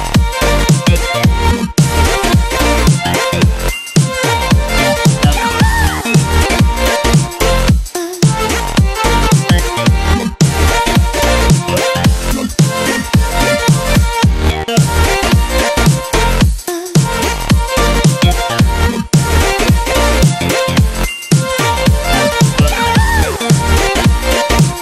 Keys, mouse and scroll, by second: 0.0-1.9 typing, 3.1 BackSpace, 4.5 shift+p, 5.1 shift+i, 6.1 space, 6.3 -, 8.0-10.1 drag, 10.3 Left, 12.1 click, 13.0 space, 13.1 click, 13.3 space, 15.2 click, 16.3-18.2 typing, 18.9 click, 21.9 click, 23.7 space, 24.1 click, 24.2-24.6 space.